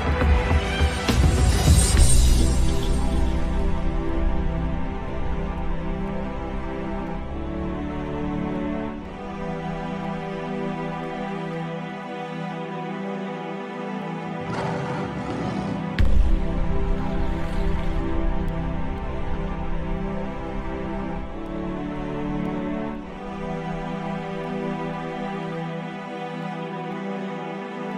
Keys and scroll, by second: 6.3 g, 7.6 Caps_Lock, 8.0 g.